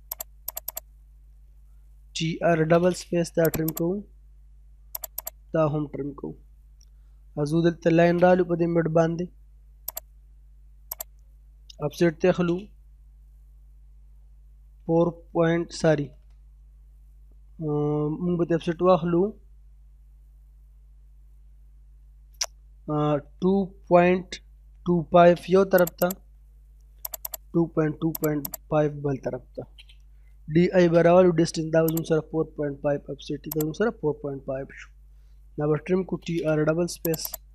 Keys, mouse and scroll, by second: 1.9-2.8 typing, 2.8-3.1 scroll up 1, 3.5 click, 4.0-4.4 scroll down 1, 5.0 click, 5.5-5.9 scroll down 1, 6.2 middle click, 6.6 scroll up 1, 6.9 middle click, 7.7 l, 7.9 space, 8.1 middle click, 9.9 click, 12.0 o, 12.2 space, 23.0-25.1 typing, 25.8 click, 26.4 scroll up 1, 27.1 click, 27.8-28.2 scroll up 1, 28.2 click, 29.4-30.6 typing, 31.9 click, 34.1-34.4 scroll down 1, 34.4 middle click, 35.2-36.1 typing, 36.3 scroll up 1, 37.1 click.